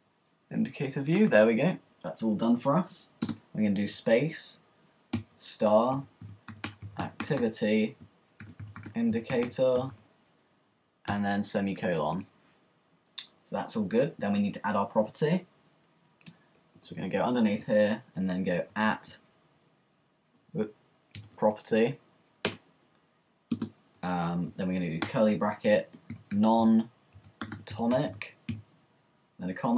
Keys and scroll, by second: 5.1 shift+*, 6.4-7.4 typing, 8.4-11.1 typing, 12.6 typing, 16.8 Return, 18.7-19.4 typing, 20.6-21.2 typing, 22.5 Return, 22.6 typing, 25.0 typing, 26.1-28.6 typing.